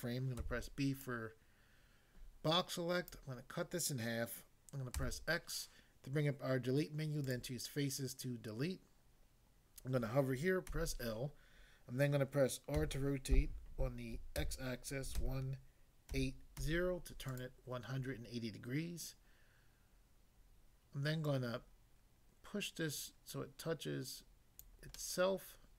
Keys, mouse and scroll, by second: 0.4 b, 1.0 click, 3.1 click, 4.9 x, 7.3 click, 10.7 l, 12.8 r, 14.4-16.6 typing, 17.3 click, 21.3 click, 24.6 click, 24.9 middle click.